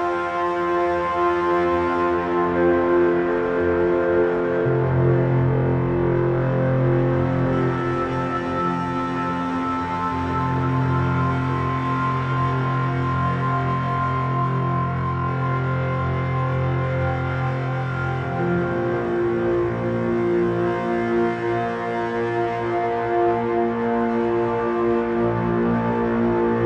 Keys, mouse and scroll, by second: 1.0-3.0 drag, 3.1-4.8 drag, 5.3-7.1 drag, 7.8-9.7 drag, 12.2-14.0 drag, 13.9 middle click, 16.1-19.6 drag, 19.6 shift+z.